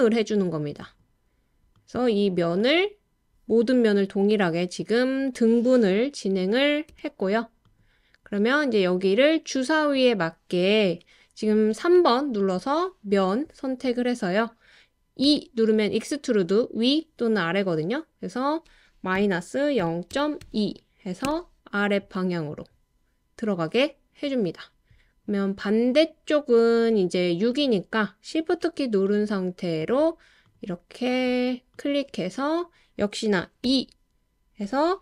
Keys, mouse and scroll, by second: 0.8 click, 1.7 click, 2.7 click, 6.9 Return, 7.7 click, 11.6 3, 15.3 e, 19.8 0, 20.1 ., 20.4 2, 21.2 Return, 31.7 shift+click, 33.6 e.